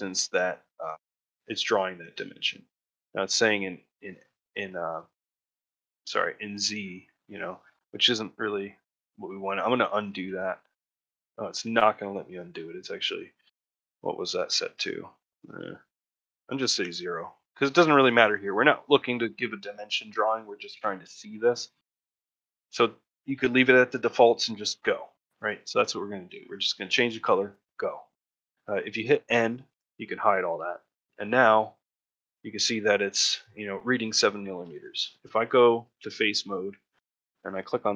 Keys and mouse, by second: 6.8-7.8 middle drag, 11.1 middle click, 13.7-17.4 drag, 18.8 middle click, 19.7 middle click, 20.2 shift+middle click, 21.9 ctrl+middle click, 22.2 shift+middle click, 30.5 middle click, 30.7 shift+middle click, 31.5 shift+middle click, 33.8 shift+middle click, 34.3 ctrl+middle click, 34.5 shift+middle click, 35.0 middle click, 36.2 middle click, 36.6 ctrl+middle click, 36.9 shift+middle click.